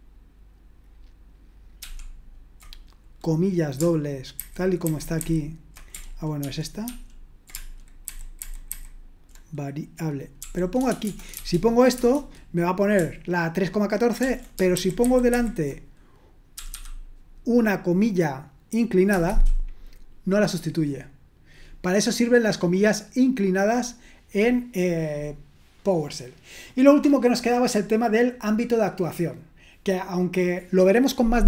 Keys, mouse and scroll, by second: 1.8 ctrl+p, 4.4 alt+b, 4.9 alt+b, 5.2 alt+b, 6.4 ctrl+p, 6.9 ctrl+p, 8.1 alt+b, 8.4 alt+b, 8.7 alt+b, 11.4 shift+4, 11.9 Return, 14.2 ctrl+p, 14.8 alt+b, 15.0 alt+b, 15.0 typing, 15.3 alt+b, 16.7 `, 19.1 Return, 22.5 BackSpace.